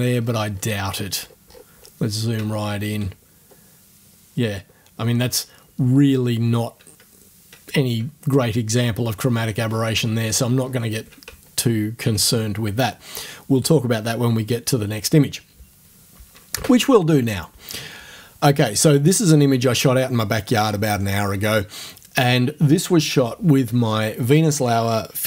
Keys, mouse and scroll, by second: 3.3 ctrl+scroll down 2, 4.3 ctrl+scroll down 2, 9.2-10.8 ctrl+scroll down 6, 11.4 ctrl+scroll up 2, 16.5 space.